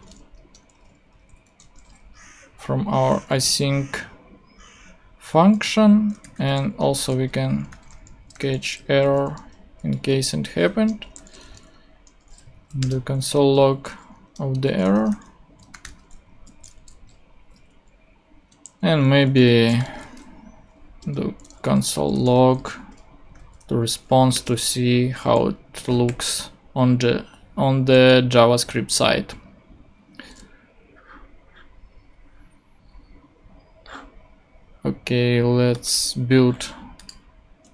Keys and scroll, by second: 0.3 Return, 1.0 super+Return, 1.1 super+Right, 2.4 Down, 3.4 space, 6.0-8.3 typing, 8.8 Right, 9.1 super+space, 10.1-12.0 typing, 10.7 shift+Return, 12.8 Return, 13.4 ., 14.2 Return, 14.6-16.3 typing, 16.7 super+;, 17.3 ;, 19.4-23.3 typing, 24.3 Return, 25.0 super+Right, 26.2 ;.